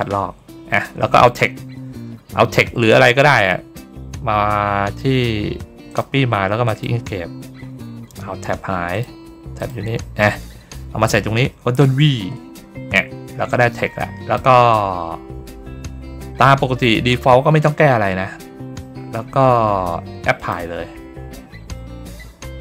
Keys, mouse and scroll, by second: 5.8 click, 6.6 click, 8.8 click, 9.5 click, 13.4 click, 20.3 click.